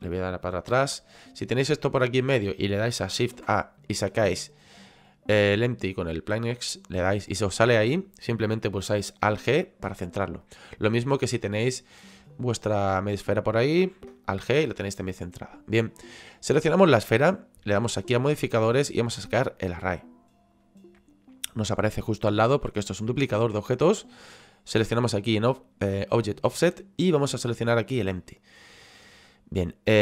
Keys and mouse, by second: 0.7 ctrl+z, 2.0 middle click, 6.9 click, 10.5 right click, 12.1 click, 16.3 right click, 18.7 click, 20.1 click, 21.3 middle click, 26.5 click.